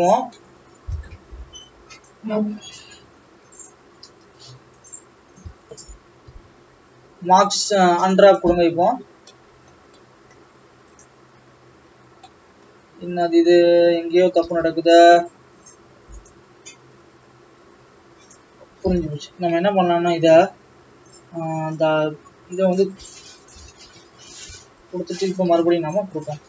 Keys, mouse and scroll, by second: 0.1 scroll down 3, 0.3 middle click, 1.1-2.1 scroll up 2, 2.1 click, 2.8 alt+a, 4.8 click, 5.6 a, 8.4 u, 11.0 click, 14.6 n, 18.3 click, 19.1 n, 19.3-19.7 scroll up 4, 19.7 Tab, 22.7-23.1 drag, 23.9 Tab, 24.4 a, 26.2 u.